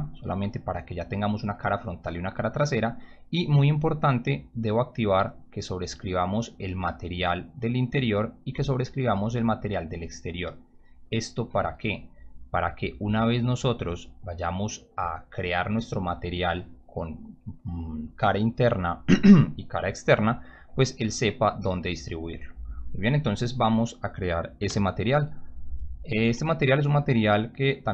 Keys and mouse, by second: 3.3 click, 5.1 click, 8.2 click, 13.2 click, 13.8 click, 14.3 click, 24.6 m, 27.6 right click.